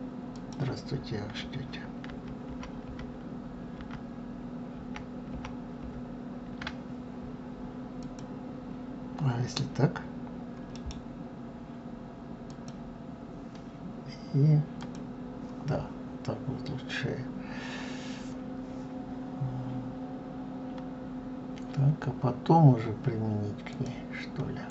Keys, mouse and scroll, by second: 0.1 click, 1.9 ctrl+z, 2.3 ctrl+z, 7.8 click, 10.5 right click, 14.6 click, 15.9-16.2 scroll up 2, 16.5 scroll down 2, 23.5 click, 24.5-24.7 drag.